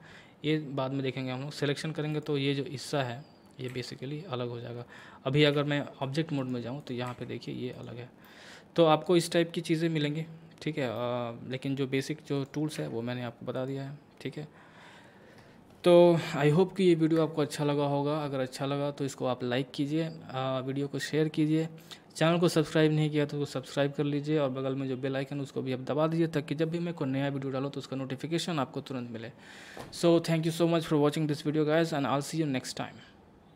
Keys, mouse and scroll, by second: 2.1 click, 3.7 g, 5.5 Tab, 6.4 click, 7.1 g, 7.7 click, 8.3-10.1 middle drag, 10.1-11.0 scroll down 1, 11.0-12.4 middle drag, 12.4 click, 12.8 Tab, 13.6 click, 14.3 scroll down 1.